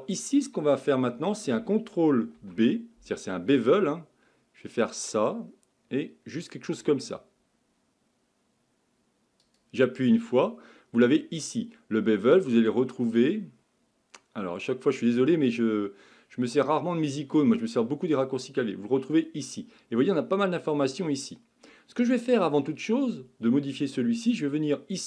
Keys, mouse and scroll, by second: 2.4 ctrl+b.